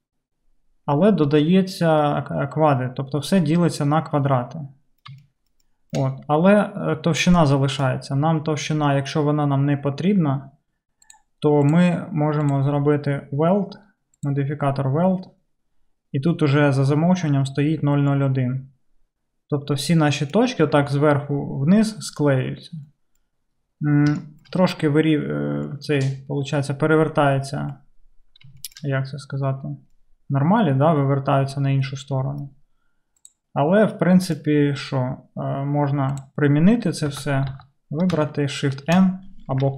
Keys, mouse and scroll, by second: 14.3-39.7 drag, 37.2 Tab, 37.5 Tab, 37.5 a, 38.9 shift+n.